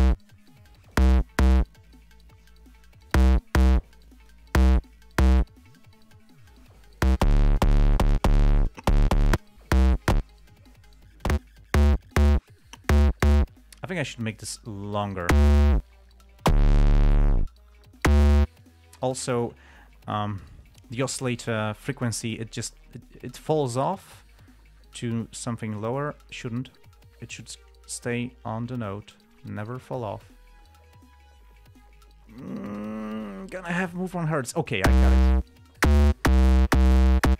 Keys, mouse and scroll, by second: 0.8-1.5 drag, 2.2-3.6 drag, 4.4-4.8 drag, 14.5-15.6 drag, 19.0 click, 21.5 click, 22.2 click, 23.4-26.3 drag, 26.7 right click, 28.0 click.